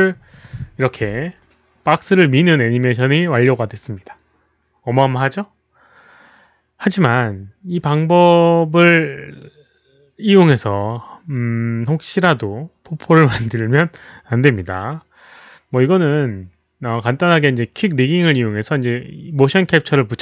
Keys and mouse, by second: 2.6 alt+click, 5.9 click.